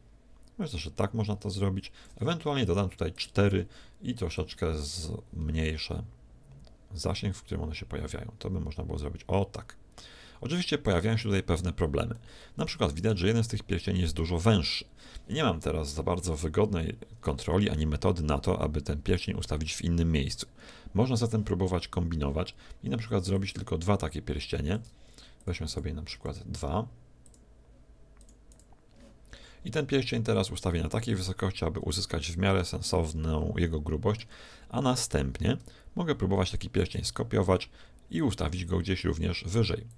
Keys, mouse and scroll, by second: 3.1-6.0 drag, 6.1 click, 12.1-14.1 middle drag, 23.4-25.3 drag, 25.4-30.3 drag, 30.5-32.1 drag, 32.2 click, 33.2-35.2 middle drag, 36.8 shift+d.